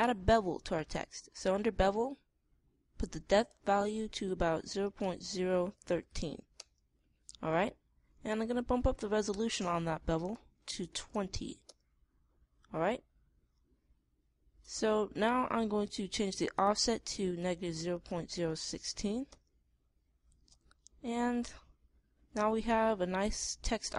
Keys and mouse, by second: 12.3 click, 13.4-15.3 middle drag, 17.0-18.8 middle drag, 21.7-23.4 middle drag.